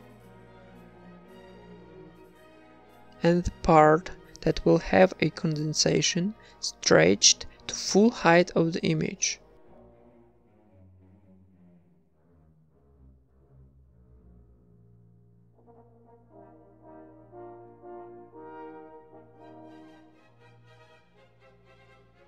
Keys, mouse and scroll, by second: 0.0 s, 0.0 z, 0.5 z, 1.5 shift+a, 5.3 click, 11.9 ctrl+r, 11.9 a, 16.0 Tab, 16.0 g, 17.1 Tab, 18.0 Tab, 18.8 Tab, 18.8 click, 19.2-21.0 right drag, 19.2 a, 21.0 u, 22.0 s, 22.0 g.